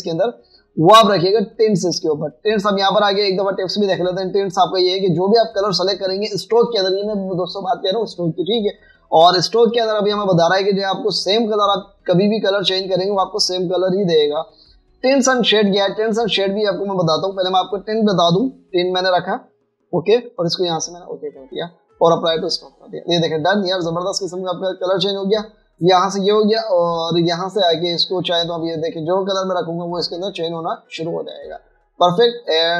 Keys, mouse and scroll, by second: 30.9 double click, 32.2 double click.